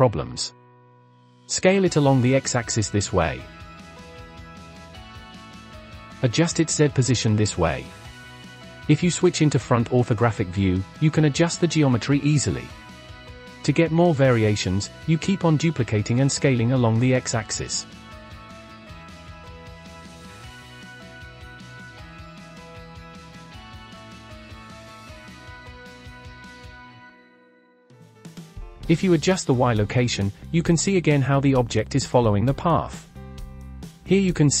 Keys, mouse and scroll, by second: 0.4 s, 3.4 g, 4.8 middle click, 5.6 KP_Decimal, 6.1-6.4 scroll up 12, 6.4 g, 8.9 KP_1, 9.8 KP_Decimal, 10.1-11.0 scroll up 15, 11.0 shift+middle click, 11.7 g, 12.5-13.8 scroll down 3, 13.8 shift+d, 14.9 s, 15.8 g, 17.4 click, 18.6 shift+d, 19.7 s, 20.8 g, 21.4-21.8 scroll down 10, 21.8-22.9 middle drag, 22.9 Tab, 23.3-24.4 shift+middle drag, 24.4 click, 24.5 scroll up 2, 24.7-25.3 middle drag, 25.3 click, 26.7-28.9 drag, 29.1-31.3 drag, 31.3-31.7 scroll down 6, 31.7-32.5 shift+middle drag, 32.5 drag, 32.8-33.2 scroll up 5, 33.2-34.6 shift+middle drag.